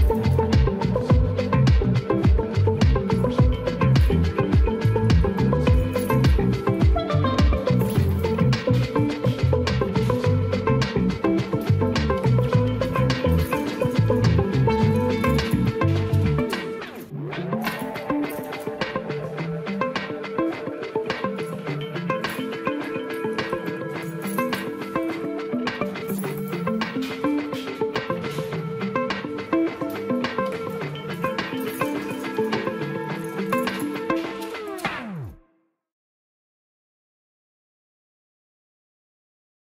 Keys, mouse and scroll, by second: 0.8-2.7 drag, 3.6 shift+middle click, 4.1-5.3 middle drag, 5.9-7.4 drag, 8.2 shift+middle click, 8.7 Tab, 9.1 middle click, 10.3-10.8 right drag, 11.3 click, 11.8-12.5 drag, 13.3 shift+click, 14.1 q, 15.7 shift+middle click, 16.2-16.7 middle drag, 17.9 click, 18.3 shift+middle drag, 18.8 click, 19.6 click, 20.4-22.2 drag, 24.6-26.5 drag, 25.6 KP_0, 29.6 click, 30.5 click, 32.0 shift+middle drag, 32.9-37.6 drag.